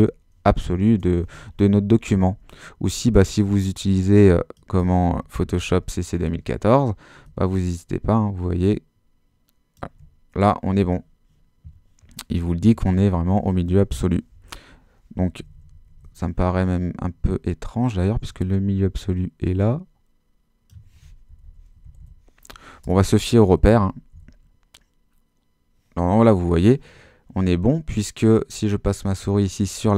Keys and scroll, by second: 5.7 super++, 12.7 super+-, 21.3 shift+Left, 21.9 Right, 22.9 Return, 23.4 super+Return, 23.5 super+-.